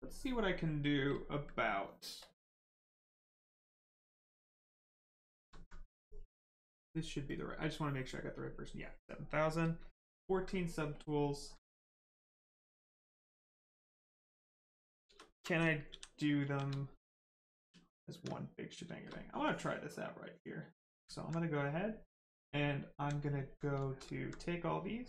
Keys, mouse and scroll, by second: 0.6 right click, 2.2 click, 4.3 click, 4.8 alt+right click, 5.1 right click, 5.2 right click, 5.3 shift+right click, 5.6 alt+right click, 7.3 click, 9.2 right click, 10.9 click, 11.6 alt+right click, 13.6 click, 14.0 right click, 15.0 shift+right click, 15.2 alt+right click, 15.6 shift+right click, 15.9 shift+f, 16.4 shift+f, 16.9 right click, 17.6 shift+d, 18.3 right click, 19.4 shift+click, 22.6 right click, 23.2 alt+right click, 23.6 right click, 23.7 right click, 23.8 shift+right click, 24.1 alt+right click.